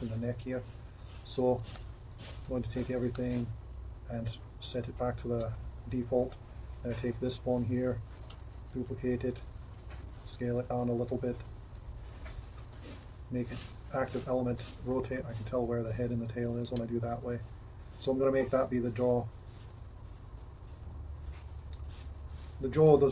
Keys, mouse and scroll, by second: 1.5 alt+g, 1.7 alt+r, 1.8 alt+s, 2.5 a, 3.0 alt+g, 3.1 alt+r, 3.2 alt+s, 5.3 Tab, 8.2 shift+d, 10.1 s, 11.4 r, 13.1 ., 14.3 r, 16.7 g, 18.7 g, 19.7 r, 22.5 g.